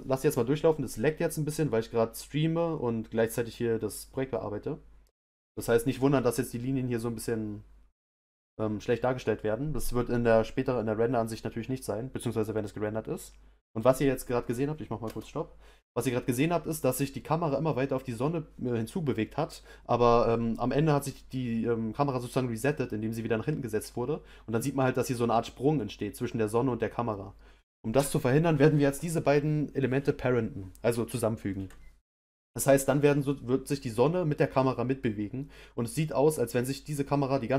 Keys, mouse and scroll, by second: 15.0 space.